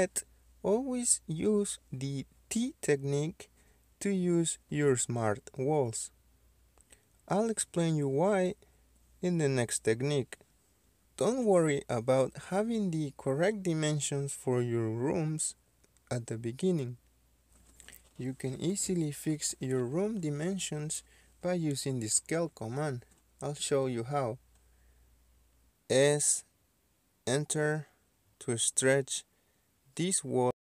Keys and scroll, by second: 10.1-10.9 typing, 25.7 s, 25.8 space.